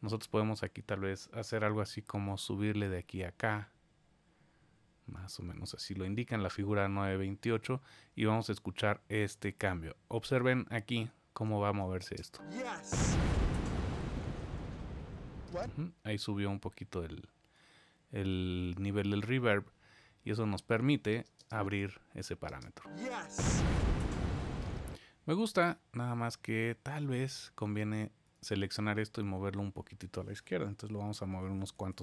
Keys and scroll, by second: 19.0 super+z.